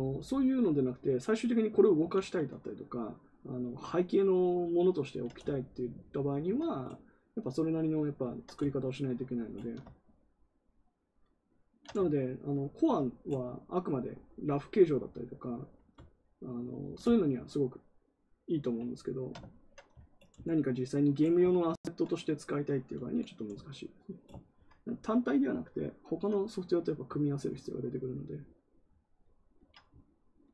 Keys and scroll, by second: 2.1 ctrl+z.